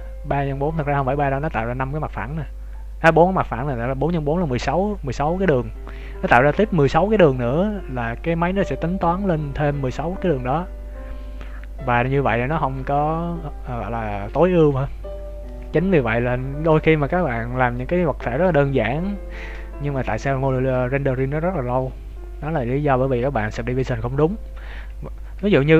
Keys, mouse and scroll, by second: 1.3 scroll down 1, 4.7 scroll down 1, 25.3 ctrl+z.